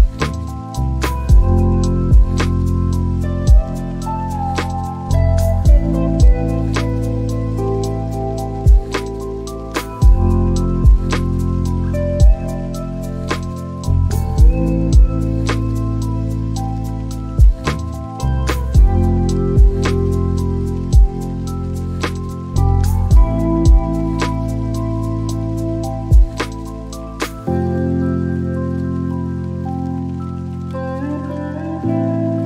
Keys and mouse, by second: 1.5 click, 6.0 click, 9.7 click, 9.9 click, 13.0 n, 15.2 right click, 18.7 click, 24.6-26.0 drag, 26.2-27.2 drag, 27.6-30.3 drag.